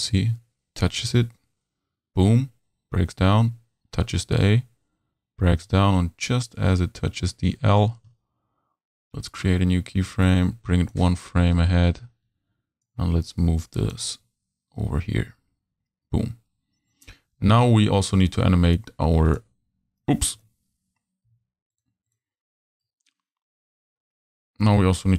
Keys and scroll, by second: 20.4 super+z, 21.3 super+v.